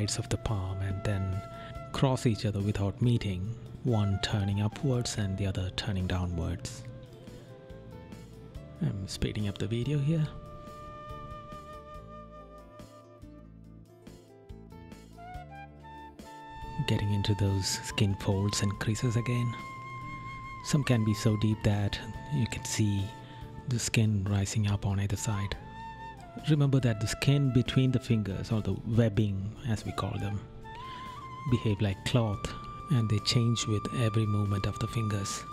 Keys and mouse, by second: 0.3 right click, 1.7 right click, 2.5 right click, 3.2 right click, 5.6 right click, 7.6 right click, 9.5 right click, 10.0 right click, 10.5 right click, 11.0 right click, 12.9 right click, 13.8 right click, 17.5 right click, 18.3 right click, 19.3 right click, 19.9 right click, 21.3 right click, 22.7 right click, 23.8 right click, 24.3 right click, 24.9 right click, 26.3 right click, 26.8 right click, 28.6 right click, 29.5 right click, 30.0 right click, 30.6 right click, 32.3 right click, 33.6 right click, 34.4 right click.